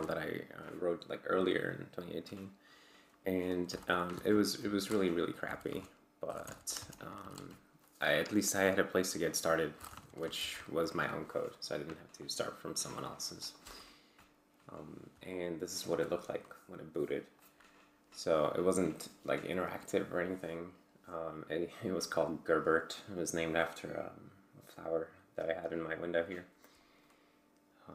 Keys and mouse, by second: 3.7-7.2 typing, 4.2 ctrl+c, 4.9 Return, 7.3 Return, 9.5-10.3 typing, 10.5 ctrl+l, 13.6 Return, 15.3-17.1 alt+drag.